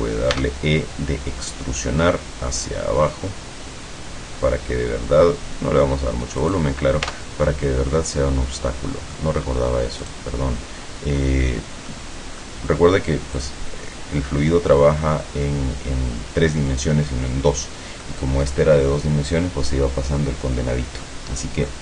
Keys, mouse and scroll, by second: 0.5 e, 6.5 click, 7.1 Tab, 7.6-9.4 middle drag, 10.1 right click, 12.0-12.7 middle drag, 13.5 click, 15.1-15.5 scroll down 2, 18.1 middle click.